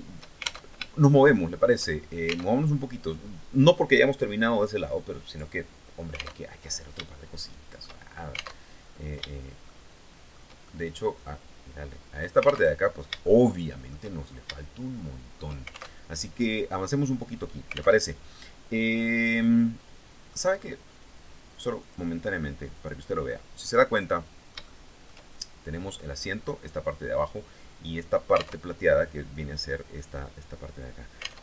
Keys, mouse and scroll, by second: 0.3 alt+shift+Tab, 0.6 shift+middle click, 2.0 alt+Tab, 6.0 alt+Tab, 6.6 shift+middle click, 8.2 alt+Tab, 9.2 shift+click, 10.2 shift+middle click, 10.8-12.0 drag, 12.2 alt+Tab, 12.8 shift+click, 13.7-14.0 shift+scroll down 2, 14.1 shift+click, 15.5 alt+shift+Tab, 17.6 alt+Tab, 18.4-20.0 middle drag, 21.4 click, 22.3 click, 22.8-24.8 drag, 28.2 alt+Tab, 31.0 alt+Tab.